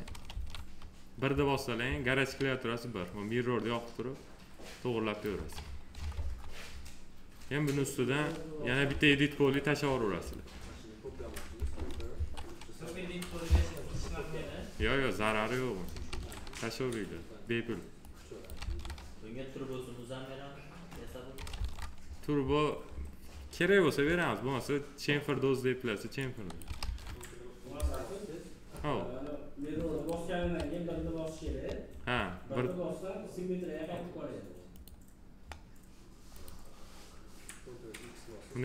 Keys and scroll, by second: 0.1 ctrl+z, 1.1 1, 5.2 1, 8.3 1, 11.4 F3, 14.5 s, 15.9 ctrl+z, 18.5 ctrl+z, 21.4 ctrl+z, 26.7 ctrl+z, 30.2 1.